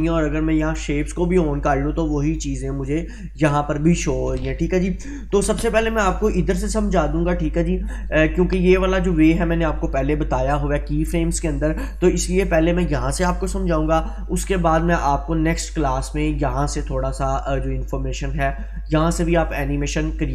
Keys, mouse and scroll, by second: 0.6 click, 1.8-2.3 scroll down 1.